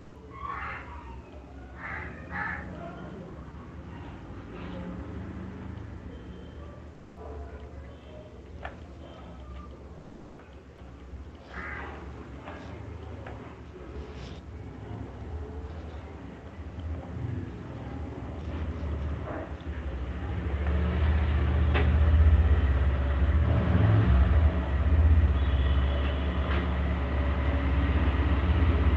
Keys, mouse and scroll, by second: 3.3 click, 5.0-7.6 scroll, 7.6 click, 9.4 right click, 10.5 shift+click, 10.7 shift+click, 11.7 alt+click, 13.2 right click, 13.8 alt+click, 17.1 alt+click, 19.8 click, 20.4 click, 23.4 click, 25.2 click, 27.8 shift+click.